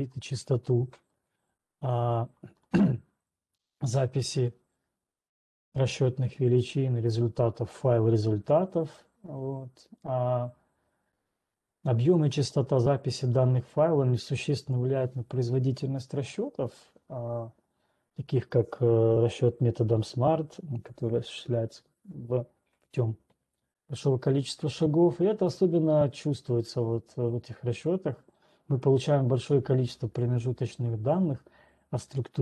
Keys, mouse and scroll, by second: 0.1-2.1 scroll down 2, 2.1 ctrl+2, 20.2-24.9 scroll.